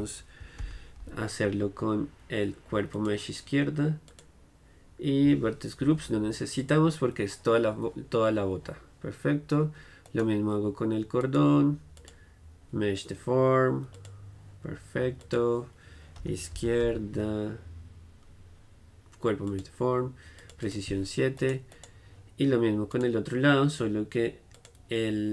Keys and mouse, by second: 10.2-11.4 right drag, 11.4-14.1 middle drag, 15.4-21.5 drag, 21.5-23.0 middle drag, 23.8-25.3 drag.